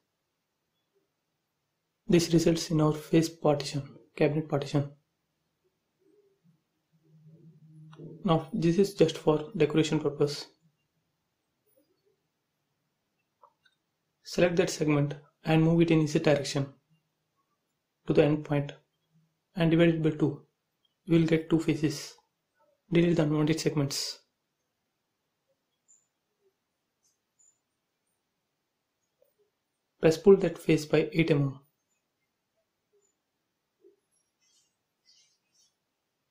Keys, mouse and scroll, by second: 1.0 space, 1.4 middle click, 1.9 scroll down 1, 2.3 click, 2.7 middle click, 3.3 click, 3.4 click, 4.0 middle click, 4.6 click, 5.1-5.4 scroll up 1, 5.4 middle click, 6.5 f, 7.0 click, 7.5-9.2 typing, 9.5 middle click, 10.3 shift+scroll up 1, 10.4 shift+middle click, 11.3 click, 12.7 click, 13.5 shift+click, 13.8 scroll down 1, 14.2 shift+middle click, 15.3 m, 16.2 ctrl+click, 17.2 Up, 18.3 click, 18.9-19.8 typing, 20.8 scroll up 1, 21.0-22.2 typing, 21.8 click, 23.8 ctrl+z, 24.3 click, 24.4 click, 25.3 shift+middle click, 26.2-28.5 drag, 28.5 scroll down 1, 29.9 p, 30.1 click, 30.2 click, 31.6-32.8 typing, 33.5 middle click, 34.6 click, 34.9 space, 35.2 scroll up 1, 35.8 click.